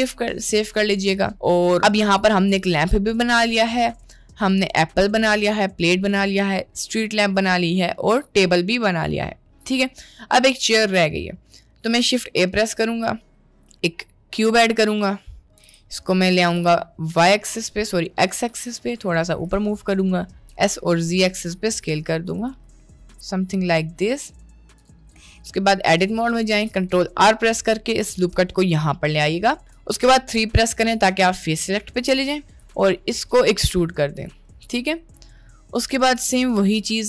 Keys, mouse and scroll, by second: 0.5 middle click, 1.3 middle click, 1.8 middle click, 3.2-3.6 middle drag, 7.3 middle click, 8.6-9.2 middle drag, 9.6 middle click, 10.3 middle click, 12.0 shift+a, 15.6 g, 16.6 g, 17.6 middle click, 18.4 middle click, 18.6 g, 20.6 s, 22.7 s, 23.1 middle click, 23.9 middle click, 24.8 s, 25.3 Tab, 25.7 middle click, 26.5 ctrl+r, 29.1 middle click, 30.1 3, 31.2 click, 32.3 middle click, 32.7 e, 34.4-35.4 middle drag, 35.9 middle click, 36.2 click, 36.7 middle click.